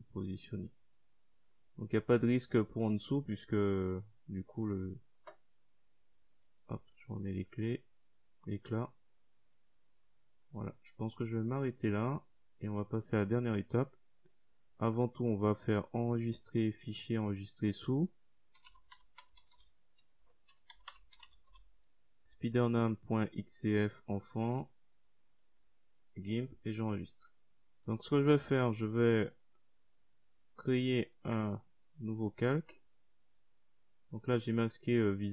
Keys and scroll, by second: 16.3-20.0 typing.